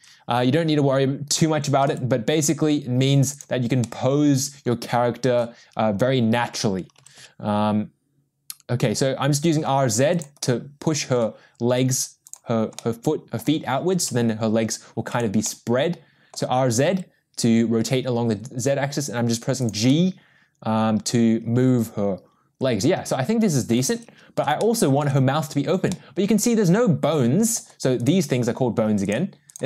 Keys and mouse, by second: 2.5 g, 3.8-5.4 middle drag, 7.2 r, 10.4-11.2 middle drag, 12.8-13.4 middle drag, 13.9 r, 15.4-16.3 middle drag, 17.2 g, 19.9-23.7 middle drag, 24.6-25.0 shift+middle drag, 25.9-27.5 middle drag, 28.1 click, 29.5 click.